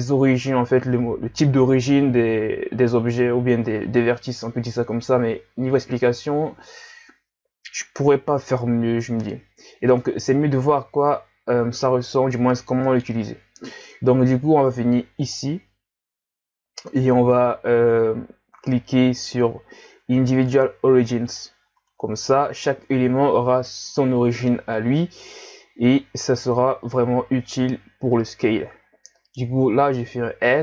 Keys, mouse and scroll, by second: 11.9-12.5 scroll down 1, 15.2 click, 29.9 s.